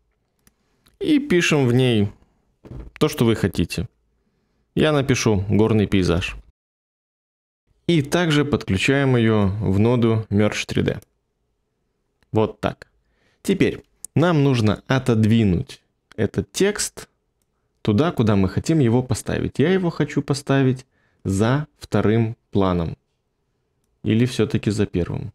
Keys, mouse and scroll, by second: 5.6-7.6 typing.